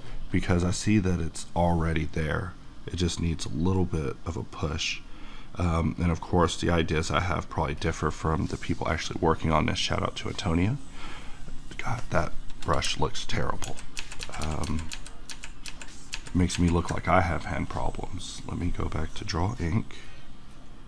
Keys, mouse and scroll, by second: 13.6 ctrl+z, 17.7 click.